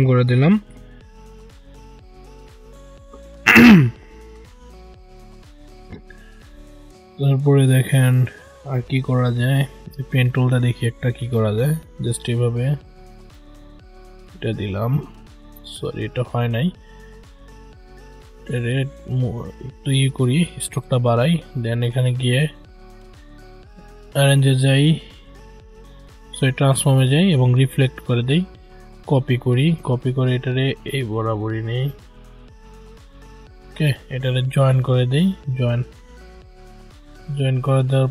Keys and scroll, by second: 15.6 ctrl+z.